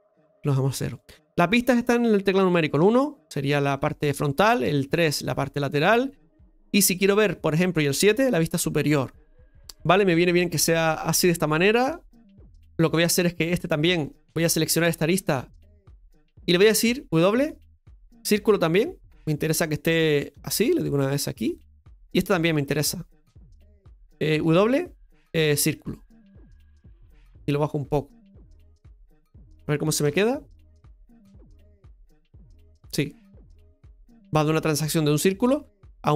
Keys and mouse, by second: 10.0-11.1 middle drag, 11.2-13.5 shift+middle drag, 13.5-15.5 right drag, 15.7 alt+shift+right click, 22.2 right click, 22.6 alt+shift+right click, 23.1 right click, 27.5 click, 30.0 KP_Divide, 30.9-34.6 middle drag.